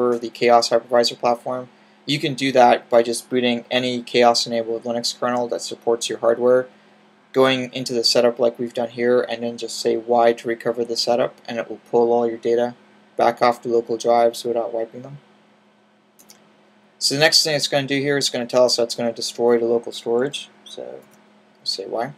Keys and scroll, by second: 20.2 y.